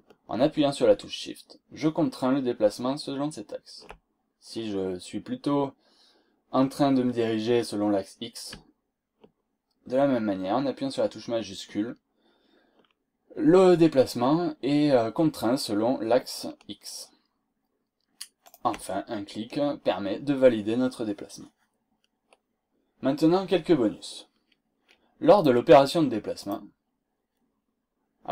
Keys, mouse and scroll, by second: 18.4 shift+click, 25.4 click, 26.4 click.